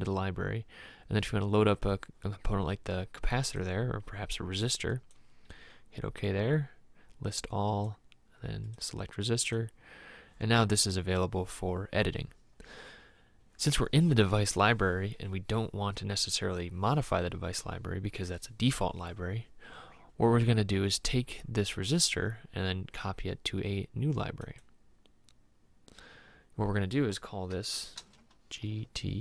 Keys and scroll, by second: 28.2 shift+g, 28.8 shift+t.